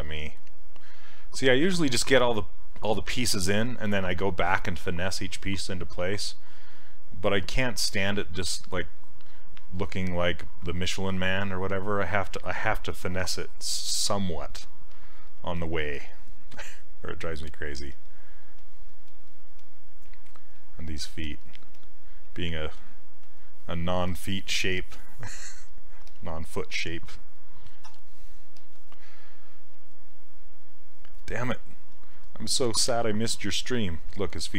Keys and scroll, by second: 0.0 s, 15.6 s, 26.1 s, 27.9 e.